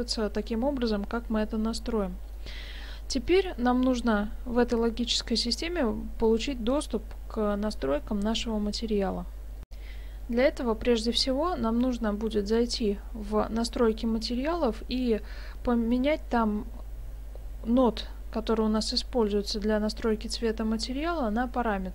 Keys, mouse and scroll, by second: 2.4 middle click, 3.4 middle click, 5.4 middle click, 9.7 F9.